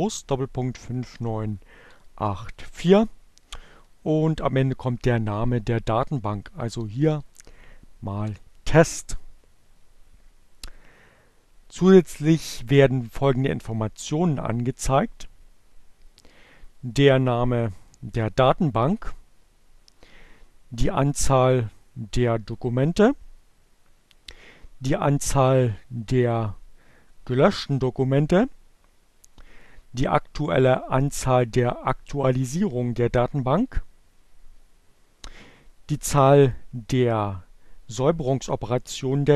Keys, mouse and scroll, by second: 1.4 Left, 2.1 Delete, 5.6-7.5 typing, 15.2-17.9 drag, 20.9 click, 25.4-26.7 drag, 30.3 click, 35.4-37.9 drag.